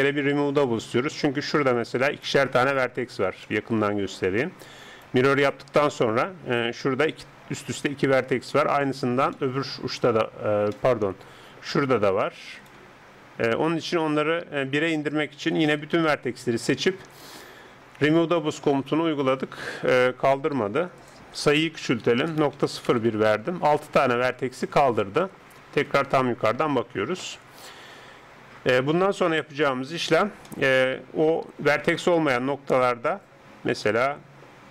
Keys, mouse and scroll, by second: 1.1 Escape, 1.9 right click, 3.5-4.8 middle drag, 4.8-7.8 right drag, 8.7 middle click, 9.5-10.7 drag, 11.4-12.5 middle drag, 12.5 right click, 15.7 a, 15.9 a, 18.1-20.6 drag, 21.0-22.9 drag, 25.0 middle click, 25.9 KP_7, 30.5-34.1 middle drag, 31.9 right click.